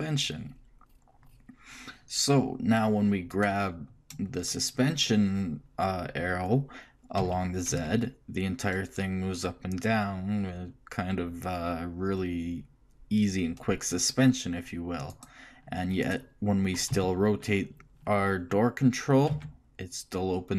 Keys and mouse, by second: 3.5-5.3 right drag, 7.4 g, 16.2 click, 17.1 right click, 17.1 r.